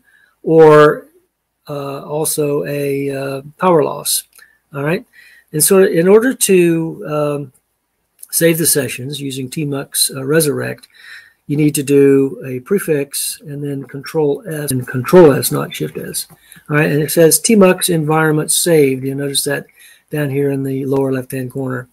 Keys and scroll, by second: 13.4 ctrl+a, 14.7 ctrl+a, 14.7 s, 16.0 ctrl+s.